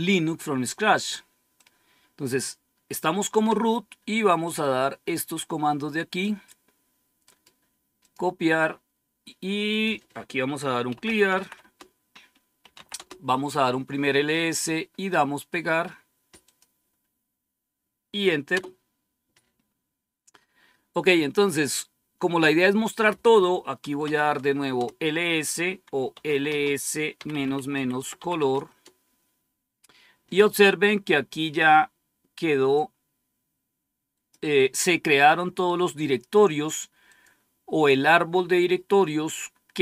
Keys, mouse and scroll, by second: 1.5 click, 4.3-6.2 drag, 7.1 right click, 7.9 click, 9.6 click, 10.5-13.0 typing, 15.4 right click, 16.3 click, 18.4 Return, 23.5-24.4 typing, 24.6 Return, 26.0-28.8 typing, 31.0-31.7 typing, 32.7-34.3 drag, 37.0 click.